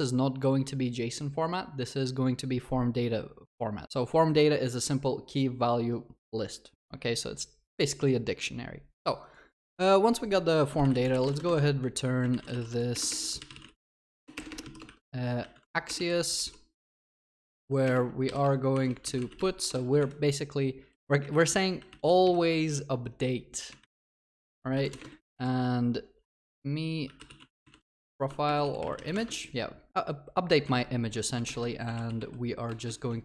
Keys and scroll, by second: 13.2 ctrl+BackSpace, 16.8 ctrl+BackSpace, 16.8 Return, 28.5 ctrl+BackSpace.